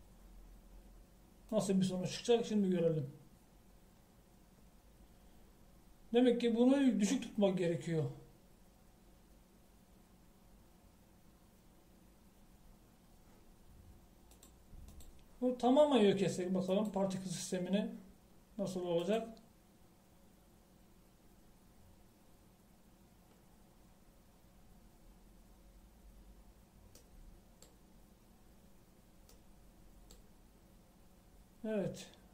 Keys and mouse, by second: 2.6 click, 15.5-20.7 drag.